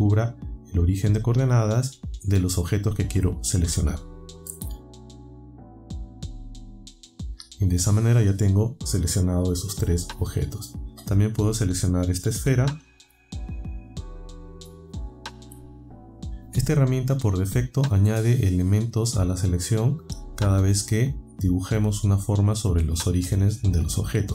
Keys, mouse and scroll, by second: 13.0-14.7 ctrl+right drag, 22.2-23.9 ctrl+right drag.